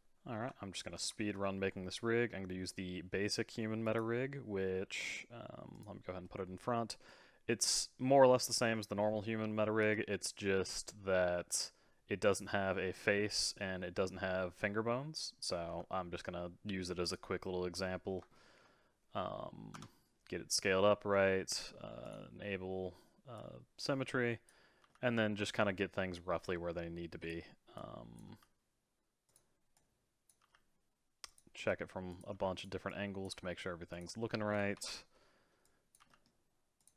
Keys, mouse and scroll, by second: 0.0-0.8 middle drag, 0.9 shift+a, 5.7 click, 6.2-9.3 middle drag, 9.8 KP_1, 15.7 s, 18.3-19.7 shift+middle drag, 19.7 Tab, 22.1 click, 23.3 click, 24.9 g, 27.7 click, 28.4 g, 29.7 click, 30.5 g, 31.5 r, 32.3 g, 32.9 click, 33.4 g, 34.8 KP_3, 35.6 click, 36.0 g.